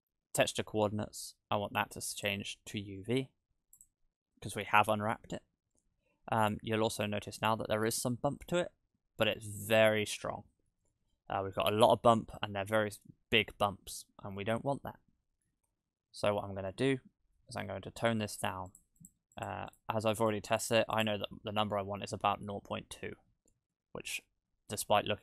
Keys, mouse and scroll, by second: 2.2 click, 5.5-6.4 scroll down 1, 6.4 middle click, 6.4-7.2 scroll down 7, 7.1 middle click, 8.1-9.3 scroll up 4, 8.4 middle click, 10.9 scroll down 1, 11.1 middle click, 12.5-13.0 scroll up 3, 13.3 scroll down 1, 13.9-14.4 scroll down 2, 14.4 shift+middle click, 18.3 click, 18.7 click, 19.0 click, 19.3 click, 19.7 click, 20.2 click, 20.5 click, 20.9 click, 21.9-22.3 scroll up 3, 22.3 middle click, 23.2-24.6 scroll down 3, 23.7 middle click, 24.9-25.2 scroll up 2.